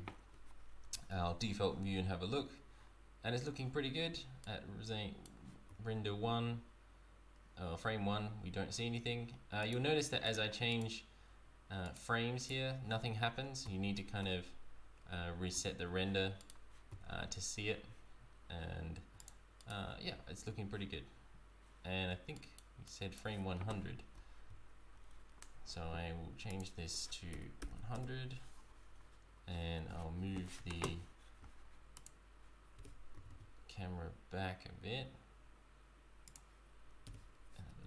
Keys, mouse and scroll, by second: 0.9 z, 4.5 right click, 5.7 z, 9.7 right click, 10.4 right click, 10.8 right click, 11.9 right click, 12.5 right click, 13.6 z, 15.6 z, 16.4 right click, 16.9 z, 18.7 z, 19.3 click, 19.6 right click, 20.1 z, 22.4 right click, 22.8 right click, 24.3 z, 26.5 click, 27.7 KP_0, 31.9 click, 32.7 g.